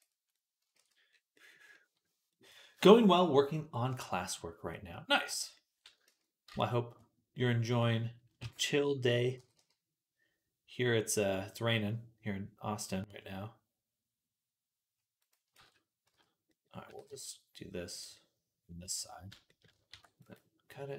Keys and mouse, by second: 0.7 ctrl+s, 0.7-4.0 drag, 4.0-6.3 middle drag, 5.9 ctrl+z, 6.3 ctrl+z, 8.3 z, 9.2 g, 11.2-18.9 middle drag, 15.4 ctrl+z, 15.9 z, 16.7 g, 19.7 ctrl+r.